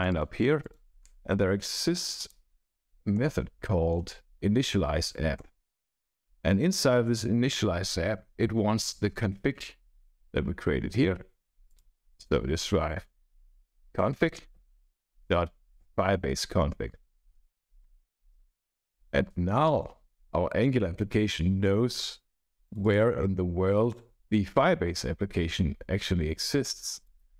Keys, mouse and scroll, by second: 0.5 click, 1.0 scroll down 2, 1.7 click, 2.1 click, 3.1-5.2 typing, 5.3 Return, 9.1-9.9 scroll up 1, 11.6 click, 12.6 BackSpace, 13.4 c, 14.3 Return, 15.7 Return, 17.3 scroll down 1, 18.9 Right, 19.6 shift+;, 22.7 click, 27.0 click.